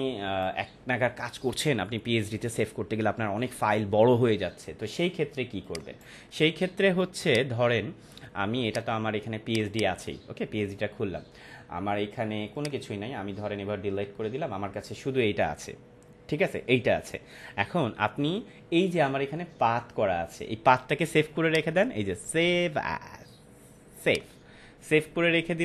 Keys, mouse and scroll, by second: 5.6 click, 12.5 click, 12.6 click, 13.1 Delete, 21.4 click, 24.0 click.